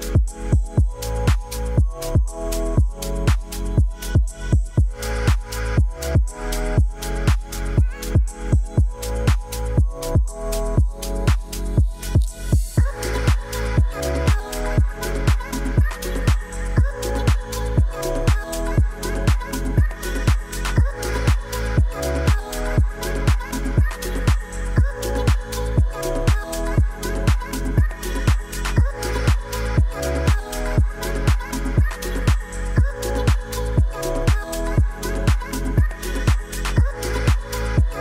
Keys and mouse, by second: 0.8-1.1 middle drag, 1.6-3.0 drag, 3.7-4.4 middle drag, 6.1 shift+d, 8.1 click, 9.8-11.0 drag, 12.2 ctrl+s, 12.5 middle drag, 13.6-13.9 drag, 14.2 ctrl+s, 14.6 KP_0, 15.9 shift+a, 22.1 g, 22.3 z, 23.8 click, 24.3 s, 25.2 click, 26.2 shift+middle click, 27.6 click, 29.5-31.3 drag, 30.3 0, 33.0 shift+middle drag.